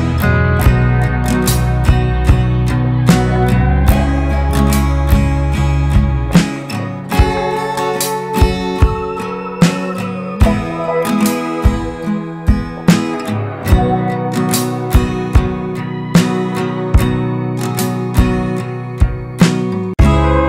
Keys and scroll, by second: 6.3 ctrl+x, 8.0 ctrl+f.